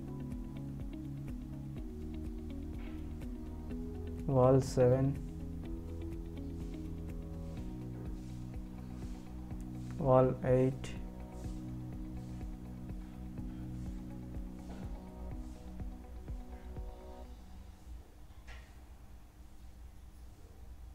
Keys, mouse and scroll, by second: 0.2 ctrl+alt+click, 10.1 shift+click, 19.1-19.4 scroll down 1, 20.1 click.